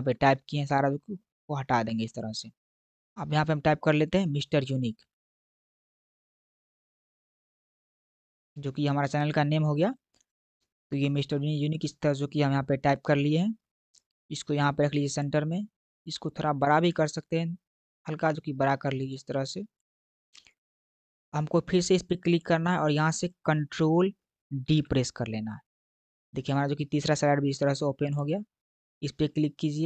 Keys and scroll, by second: 5.0-6.7 typing, 8.2-8.9 typing, 24.6 ctrl+d.